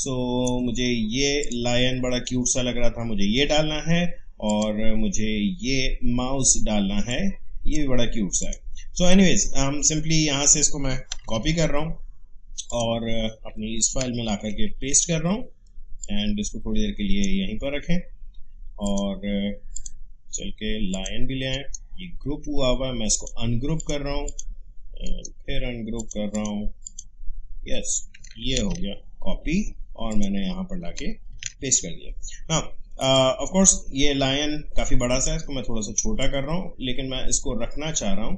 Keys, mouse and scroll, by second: 1.4 click, 4.4 click, 6.8 space, 7.1 click, 7.4 space, 8.4 click, 11.2 ctrl+c, 12.7 click, 14.4 ctrl+v, 16.0-18.8 drag, 21.5 right click, 23.1 click, 25.0 right click, 26.0 click, 28.5 ctrl+c, 30.1 click, 31.3 ctrl+v, 33.1 click, 36.2-38.3 drag.